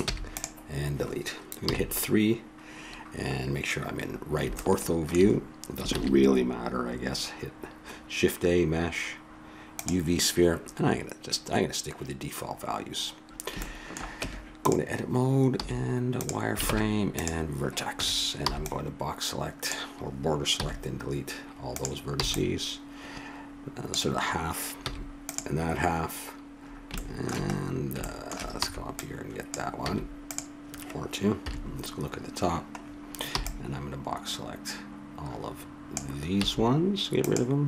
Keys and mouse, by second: 0.0 x, 1.6 KP_3, 4.6 middle click, 5.9 shift+a, 12.5 middle click, 13.6 middle click, 14.1 Tab, 15.6 z, 16.7 ctrl+Tab, 17.9 a, 18.4 b, 20.5 x, 22.2 b, 24.8 x, 26.5-30.0 middle drag, 28.6 b, 29.8 x, 31.4 KP_7, 33.3 b, 36.4 x.